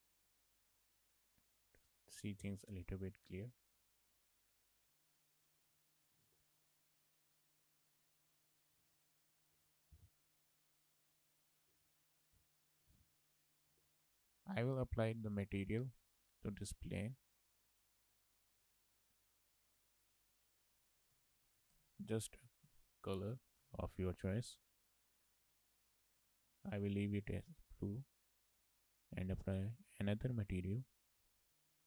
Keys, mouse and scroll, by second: 0.6 click, 1.7 click, 5.4 click, 5.6 Tab, 6.3 k, 12.8 z, 13.8 z, 15.4 click, 17.7 Left, 19.0 Left, 20.0 Left, 24.4 Left, 26.1 Left, 30.2 Left.